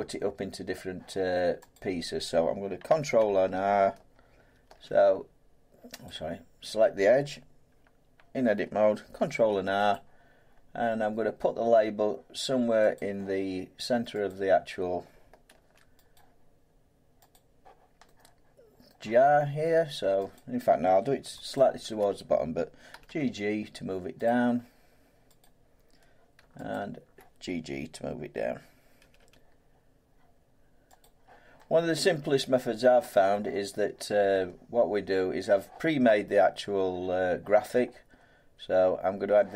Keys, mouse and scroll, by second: 1.7 click, 4.7 ctrl+t, 6.1 click, 9.2 ctrl+r, 9.9 click, 13.0 click, 14.3 click, 15.5 ctrl+r, 16.1 click, 17.3 click, 18.9 middle click, 20.3 click, 21.6 alt+click, 22.9 g, 23.1 g, 24.3 click, 25.4 click, 26.7 click, 29.0 g, 29.2 g, 31.0 click, 33.3 middle click.